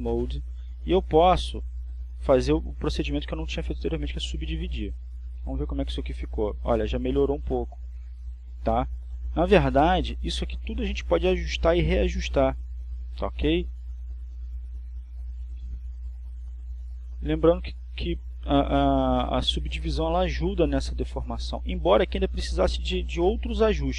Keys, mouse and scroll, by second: 2.2 click, 3.7 click, 8.5 click, 9.9 Tab, 13.6 Tab, 15.2-15.7 scroll up 1, 15.7-16.2 scroll down 2, 19.1 click, 19.9 Tab, 21.8 right click, 23.1 r.